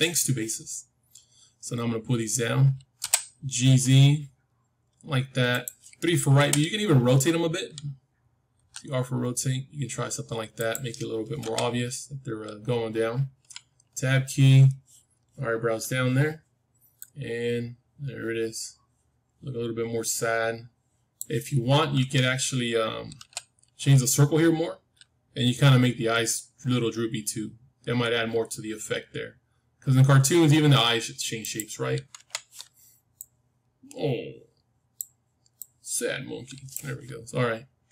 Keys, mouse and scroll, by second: 2.9 g, 6.3 KP_3, 7.3-9.4 middle drag, 8.5 r, 11.3 KP_1, 13.9 Tab, 16.9-18.9 drag, 21.9 Tab, 23.1 g, 31.7-33.1 scroll up 1, 32.1 Tab, 33.1-35.1 drag, 33.1-33.8 scroll up 1, 33.8 scroll up 1, 35.5-37.5 drag, 37.1 middle click.